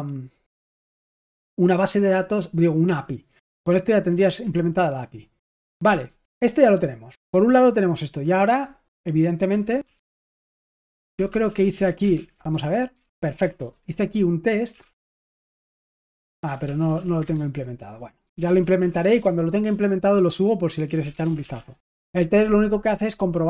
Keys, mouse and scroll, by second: 5.7-7.0 typing, 9.6-19.2 typing, 20.6-22.0 typing.